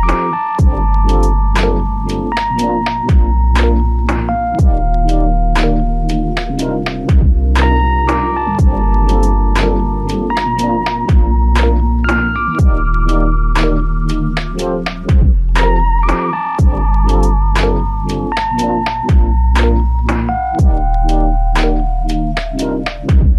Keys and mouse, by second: 1.2 double click, 2.3 alt+click, 3.5 double click, 4.4 alt+click, 6.8 f, 6.9 alt+click, 8.0 double click, 8.8 shift+click, 11.3 double click, 13.6 alt+click, 16.2 alt+click, 17.6 double click, 18.1 alt+click, 19.5 double click, 20.9 alt+click, 22.8 alt+click.